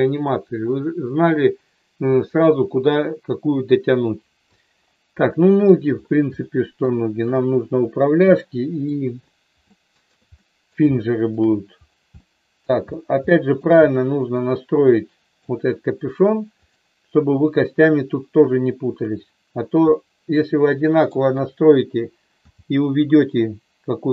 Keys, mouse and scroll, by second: 5.3 middle click, 6.4 shift+middle click, 6.9 shift+middle click, 8.3 middle click, 9.7 shift+middle click, 10.4 middle click, 11.0 shift+middle click, 12.3 middle click, 13.3 shift+middle click, 13.7 middle click, 14.9 middle click, 16.6-18.0 drag, 19.9-21.0 middle drag, 22.4 g.